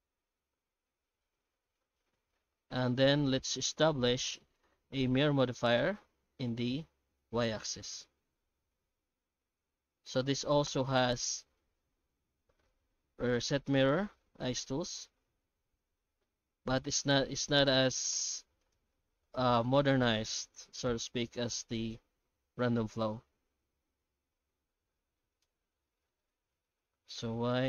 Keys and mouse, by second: 5.2 Tab, 7.3 shift+q, 8.6 shift+q, 10.1 ctrl+shift+x, 17.9 right click, 20.0 shift+q.